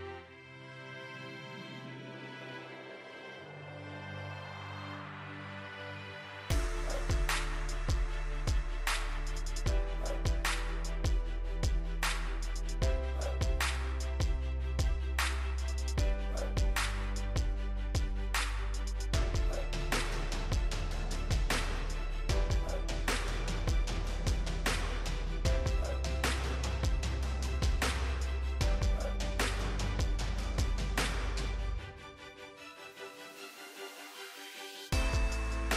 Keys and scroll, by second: 30.9 ctrl+j.